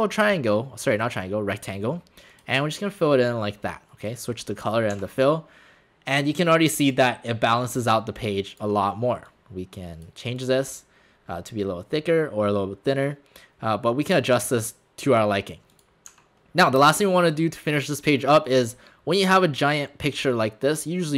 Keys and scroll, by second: 4.9 w, 16.1 w, 16.8 space.